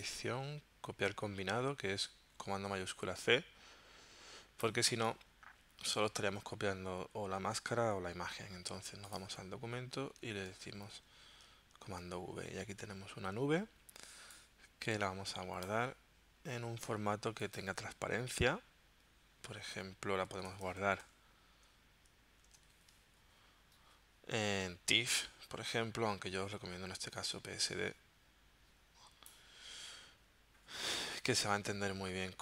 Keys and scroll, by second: 11.3 super+v, 20.2-22.7 typing.